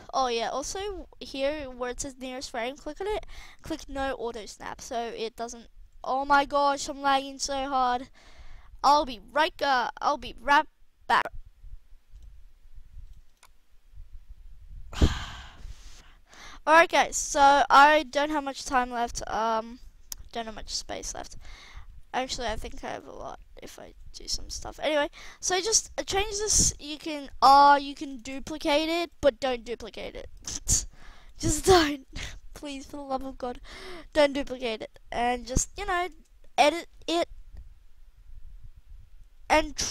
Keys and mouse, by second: 1.9-6.5 middle drag, 11.1 \, 20.1 g, 21.8 r, 22.9 g, 26.6 r, 28.1 shift+d, 29.2 ctrl+z, 36.0 KP_0, 37.0 alt+a, 39.5 alt+a.